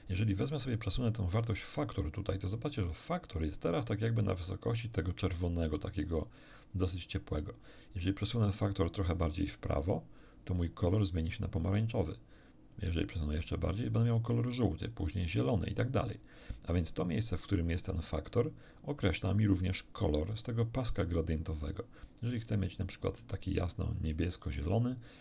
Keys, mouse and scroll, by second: 8.1-10.4 drag, 12.7-13.9 drag, 15.1-16.5 drag, 18.3-20.0 drag, 22.3-23.7 drag.